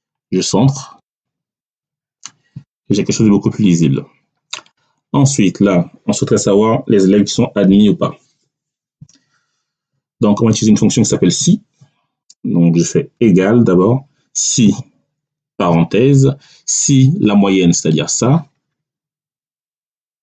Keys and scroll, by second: 13.1 =, 14.3 s, 14.5 i, 15.4 5.